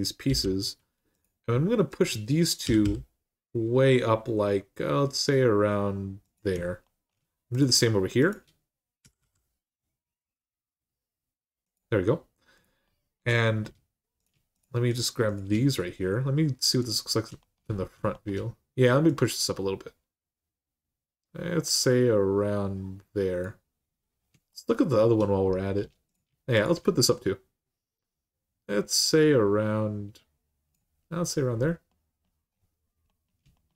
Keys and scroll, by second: 0.1 j, 2.4 g, 8.8 g, 9.0 g, 14.1 typing.